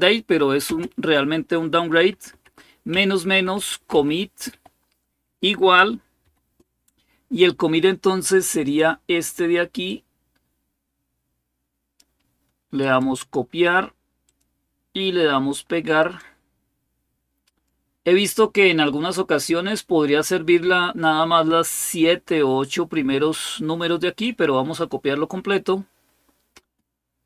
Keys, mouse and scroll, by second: 0.5 typing, 1.9-4.3 typing, 6.0 typing, 9.7-11.8 drag, 12.6 click, 14.0 click, 14.5 click, 15.8 right click, 17.2 click, 24.0 click, 26.4 space.